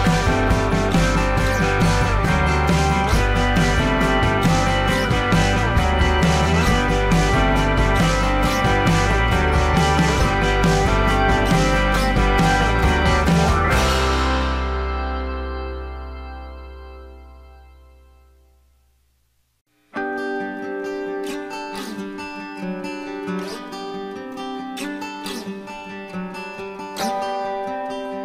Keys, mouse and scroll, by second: 2.1 alt+scroll down 1, 2.4 space, 5.2 alt+scroll up 1, 7.3-7.6 alt+scroll down 1, 22.0 alt+scroll up 1, 23.9 alt+click, 27.7 alt+click.